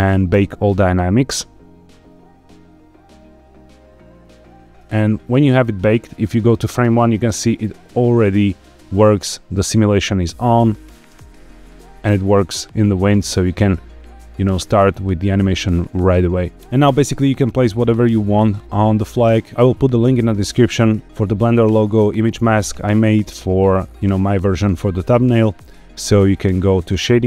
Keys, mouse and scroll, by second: 0.2-4.6 drag, 5.3-6.9 drag, 11.0 space, 15.4 scroll down 1, 16.8-17.1 shift+middle drag, 22.8-25.9 scroll up 1.